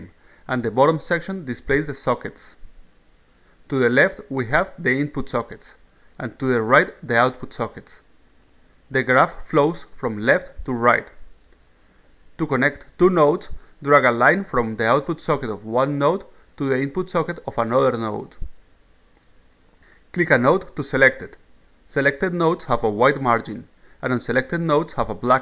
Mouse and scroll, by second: 13.9-15.1 drag, 20.3 click, 22.0 click, 23.4 click.